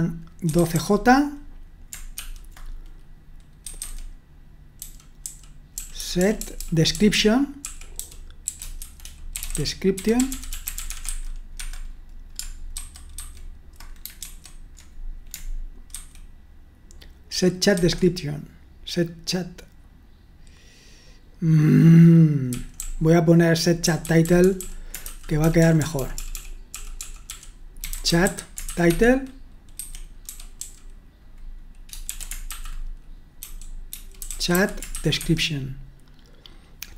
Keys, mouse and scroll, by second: 0.0-0.7 typing, 2.2 typing, 3.6-12.0 typing, 12.7 alt+1, 13.1 alt+2, 14.2 super+1, 16.0 super+2, 17.7 super+1, 22.7-30.7 typing, 32.1-34.9 typing, 35.2 Escape.